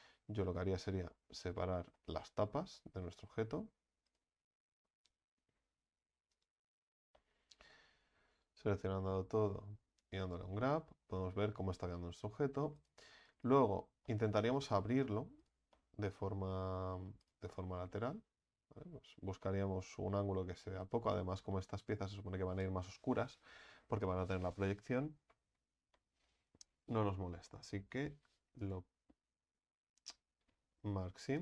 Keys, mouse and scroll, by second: 0.4-0.8 scroll up 5, 0.8-4.1 middle drag, 4.1 alt+shift+right click, 6.5 u, 6.7-7.2 scroll down 3, 7.2 middle click, 7.9 a, 8.0 a, 10.3 u, 12.8 right click, 13.3 alt+shift+right click, 13.5 alt+shift+right click, 14.1 middle click, 14.9-15.4 scroll up 4, 15.4 right click, 15.7-16.8 middle drag, 16.8-17.2 scroll up 1, 17.2 right click, 17.5-17.9 scroll down 7, 17.9-19.1 middle drag, 19.1-19.4 scroll up 2, 19.4 middle click, 20.1-20.9 scroll up 2, 20.9 ctrl+right click, 21.5-25.1 middle drag, 25.1 scroll down 2, 25.9-28.7 shift+middle drag, 28.7 u.